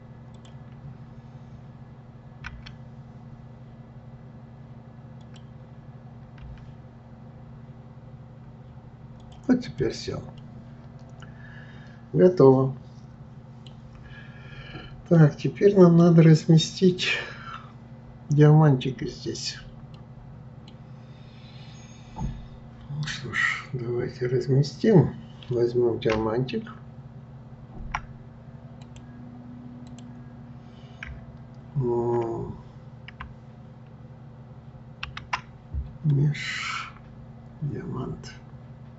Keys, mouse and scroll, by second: 9.7 click, 10.4-13.4 middle drag, 14.1-15.2 scroll down 2, 15.2-18.1 middle drag, 19.9-22.9 middle drag, 35.0 shift+a.